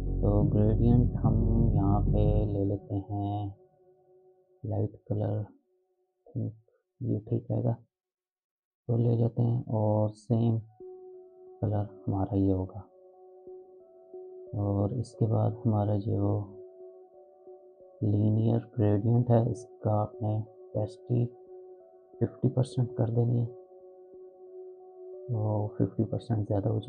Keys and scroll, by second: 21.8-22.7 typing, 22.8 Return.